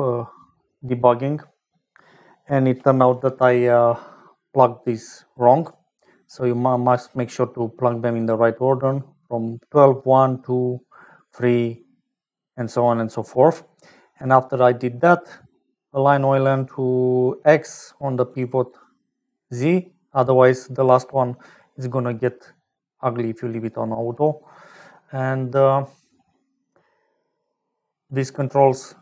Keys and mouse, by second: 5.2 click, 6.3 middle click, 7.6 middle click, 8.5 click, 10.5 middle click, 11.7 middle click, 13.3 right click, 14.9 middle click, 15.6 right click, 18.2-19.3 right drag, 21.0 shift+middle click, 21.5 middle click, 23.6 middle click, 24.7 middle click, 25.6-26.7 shift+middle drag, 27.3 middle click, 28.4-29.0 drag.